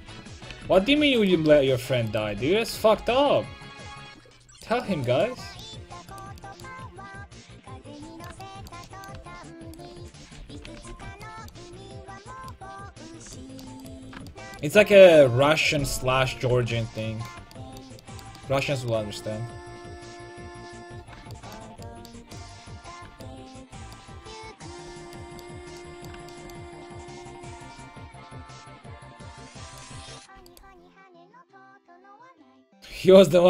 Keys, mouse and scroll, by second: 0.0 a, 0.5 a, 0.8 ctrl+t, 1.0 a, 1.6 ctrl+x, 2.4 ctrl+x, 2.7 a, 3.0 ctrl+t, 3.2 a, 6.7-8.0 right drag, 7.1 click, 9.2 a, 10.4 ctrl+x, 10.7 a, 11.0 ctrl+t, 11.1 a, 13.8-16.5 right drag, 16.0 ctrl+x, 16.3 a, 16.5 ctrl+t, 16.7 a, 29.7-32.9 right drag, 33.3 ctrl+x, 33.3 a.